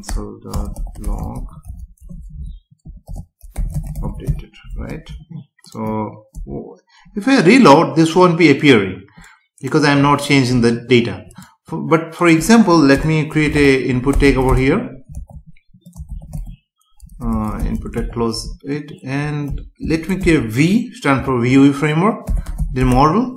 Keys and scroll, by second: 0.5 BackSpace, 2.2 Left, 4.9 ctrl+s, 6.3 F5, 12.9 Return, 18.4 Left, 19.8 space.